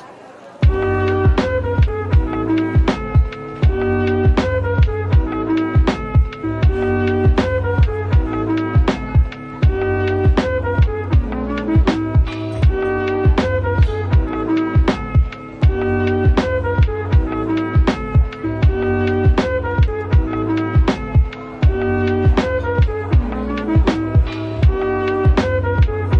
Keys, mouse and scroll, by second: 0.0-0.1 typing, 0.5-1.0 scroll down 1, 1.3 middle click, 3.3-4.3 typing, 4.5 double click, 4.8-5.7 scroll down 1, 5.7 middle click, 15.2-15.7 scroll up 1, 15.7 middle click, 19.1 /, 19.5 middle click, 20.2 scroll up 1, 20.7 middle click, 23.0 shift+Right, 23.6 a.